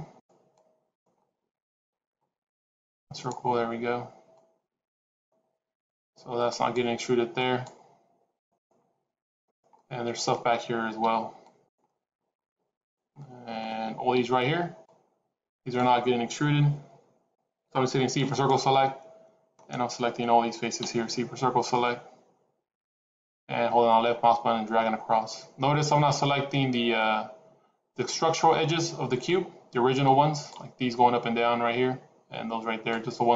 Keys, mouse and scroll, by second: 9.6 middle click, 10.8 c, 13.0 middle click, 14.0 c, 18.6 middle click, 20.7 c.